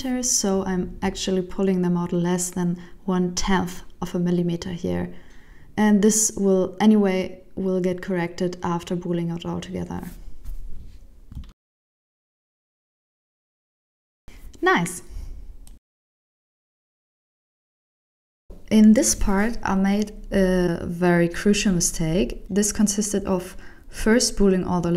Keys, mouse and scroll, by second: 0.4 b, 1.7 g, 3.5 shift+middle click, 4.0 right click, 4.3 Tab, 4.6 right click, 4.9 Tab, 5.7 alt+a, 6.1 b, 7.7 g, 10.0 Tab, 10.3 middle click, 10.9 alt+a, 11.3 shift+middle click, 11.9 alt+z, 12.2 scroll down 4, 12.5 shift+middle click, 12.9 middle click, 16.1 click, 18.0 click, 18.2 click, 18.4 Tab, 18.6 alt+a, 18.7 ctrl+alt+shift+m, 19.1 shift+middle click, 19.3 Tab, 19.5 shift+middle click, 19.8 click, 20.2 click, 20.5 click, 20.8 click, 21.0 click, 21.0 click, 21.5 click, 21.6 Tab, 21.8 alt+a, 21.9 ctrl+alt+shift+m, 22.1 Tab, 22.2 shift+middle click, 22.5 click, 23.0 click, 23.1 click, 23.4 click, 23.7 click, 24.2 click, 24.7 click, 24.8 Tab.